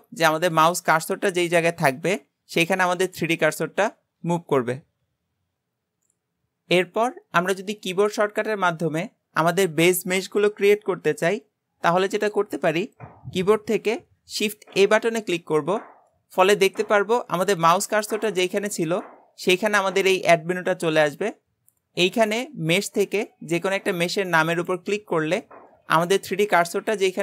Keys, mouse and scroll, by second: 14.8 shift+a.